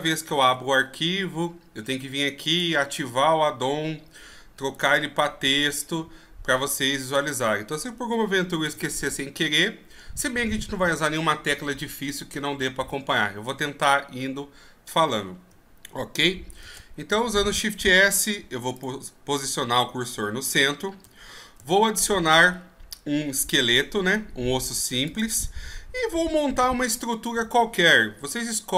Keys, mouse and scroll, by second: 4.7-5.7 right drag, 8.6 n, 16.6 shift+s, 21.6 shift+a, 26.6-28.2 scroll up 6, 28.2 KP_1.